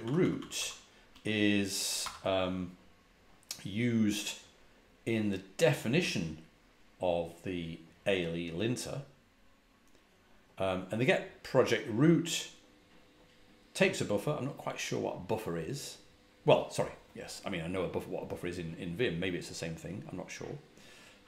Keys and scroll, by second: 2.0 shift+8.